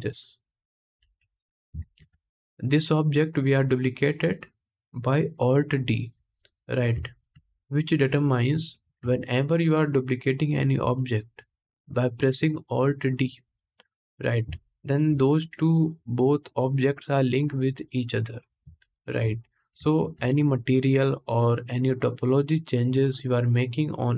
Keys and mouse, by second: 10.1 ctrl+Tab, 10.3-14.2 middle drag, 14.2-24.1 shift+drag.